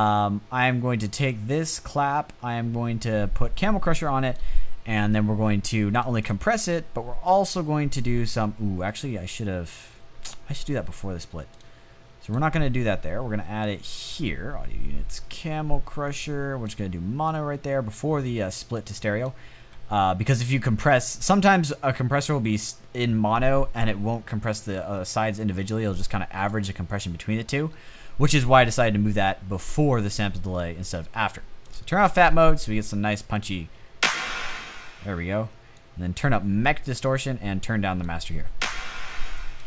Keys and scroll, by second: 33.2 space, 33.7 space, 37.8 space, 38.5 space, 39.1 space.